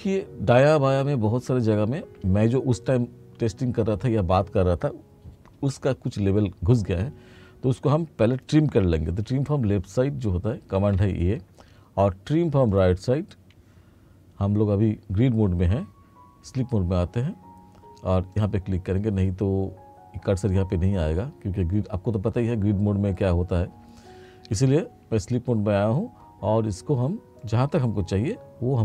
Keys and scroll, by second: 10.9 a, 16.5 F2.